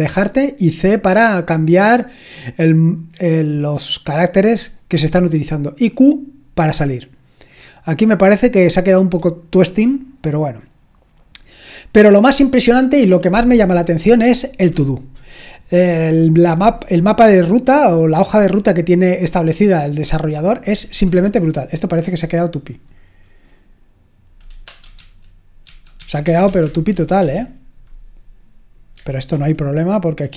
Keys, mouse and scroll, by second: 0.9-5.5 scroll down 2, 5.5-7.6 scroll down 1, 8.9-11.1 scroll down 4, 11.1-13.0 scroll down 1, 21.7 click, 22.0 q, 24.9 ctrl+c, 25.7 ctrl+c, 26.0 ctrl+c, 26.2 ctrl+c, 26.5 ctrl+c, 26.9 typing, 29.3 super+w.